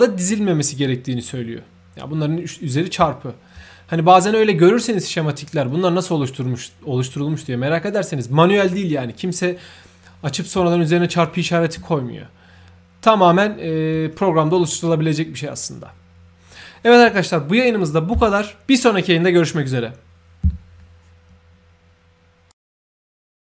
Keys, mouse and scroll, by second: 3.3 scroll down 1, 5.3-7.5 ctrl+middle drag, 12.6 scroll up 1, 13.1 scroll down 1.